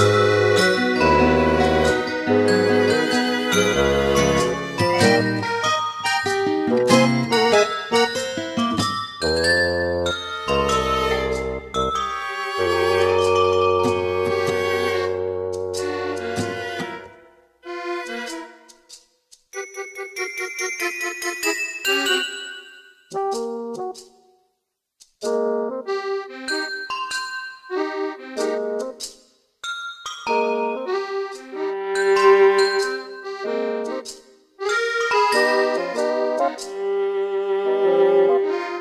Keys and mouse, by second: 0.6 middle click, 4.4 middle click, 4.7 middle click, 10.5 middle click, 11.4 middle click, 12.2 middle click, 16.1 middle click, 16.6 middle click, 20.3 middle click, 20.9 middle click, 21.3 middle click, 22.0 middle click, 22.6 middle click, 22.9 middle click, 25.9 middle click, 28.3 middle click, 29.5 middle click.